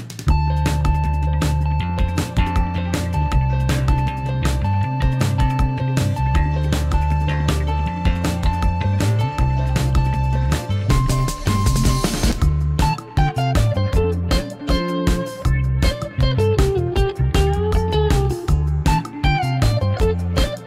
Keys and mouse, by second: 2.4 click, 3.7 Tab, 4.3 KP_7, 5.0-5.3 shift+middle drag, 5.6 g, 7.1 y, 8.1-9.6 drag, 10.2-10.7 middle drag, 11.2 shift+middle drag, 11.9 KP_1, 13.9 click, 15.2-17.0 middle drag, 17.3-18.5 middle drag, 19.5 KP_1, 20.2 g.